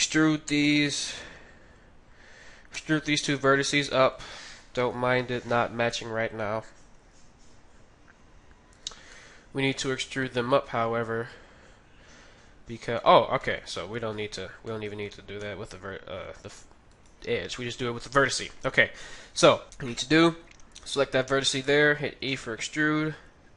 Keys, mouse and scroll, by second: 0.9-2.8 middle drag, 2.8 e, 5.1 KP_3, 7.1 g, 8.7 g, 8.8 g, 9.1-10.7 middle drag, 10.8 middle click, 14.7-16.5 middle drag, 15.0 ctrl+z, 15.4 ctrl+z, 16.9-18.9 right drag, 17.9 KP_3, 22.1 e.